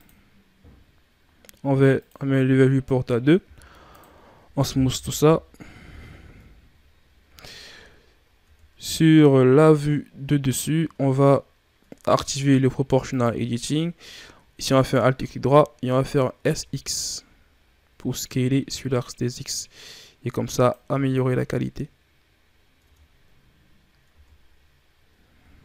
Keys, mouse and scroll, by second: 0.0-3.3 drag, 3.3 w, 4.8 KP_3, 6.3 KP_7, 7.4-8.3 shift+scroll up 5, 8.3 Tab, 9.2 scroll down 1, 10.6-11.0 shift+scroll up 1, 13.0 click, 14.7 alt+right click, 16.3 s, 20.8 Tab, 21.4-22.2 scroll down 3, 22.2-22.8 scroll up 5, 22.8 Tab, 24.1 Tab, 24.8 scroll down 4.